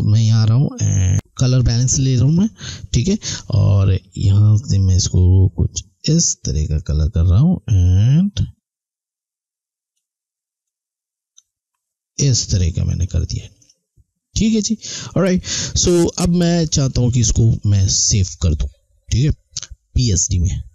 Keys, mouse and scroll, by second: 2.2 click.